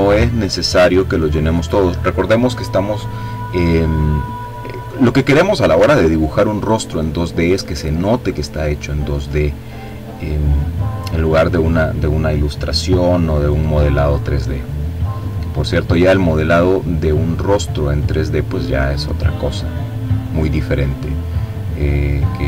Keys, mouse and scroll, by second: 2.6-3.5 scroll up 2, 3.8-4.4 ctrl+scroll down 2, 4.6-5.1 ctrl+scroll down 2, 5.2-6.1 ctrl+scroll up 1, 6.1-7.6 ctrl+drag, 7.8-8.9 drag, 11.1 click, 12.5-17.0 drag, 18.1 click, 21.0 click, 21.6 click.